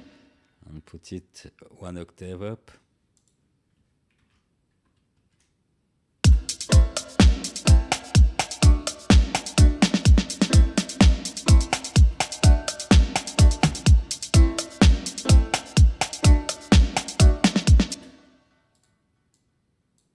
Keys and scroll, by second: 4.1 ctrl+a, 6.2 space, 17.9 space.